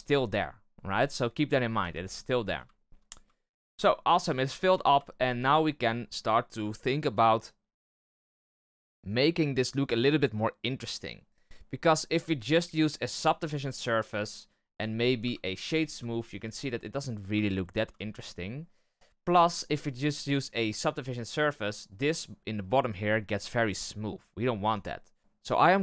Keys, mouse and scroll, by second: 1.7 x, 2.2-2.7 scroll down 6, 2.7 shift+middle click, 3.3-4.6 shift+middle drag, 4.6 Tab, 5.0-8.1 shift+middle drag, 12.1-14.7 drag, 14.7 right click, 15.1 w, 16.0-16.9 shift+middle drag, 16.9-17.4 scroll up 1, 17.4-18.7 shift+middle drag, 18.7-19.2 scroll down 1, 19.2-22.6 shift+middle drag, 24.2-24.6 scroll up 1, 24.6 Tab, 25.2-25.8 middle drag.